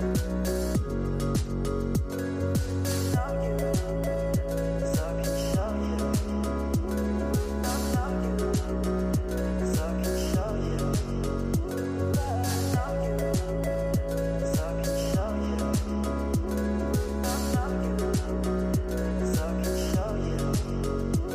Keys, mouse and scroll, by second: 0.8-4.6 typing, 6.4 click, 6.6 space, 7.7 Left, 8.7 space, 9.0 space, 9.7 Left, 10.1 space, 16.6 space.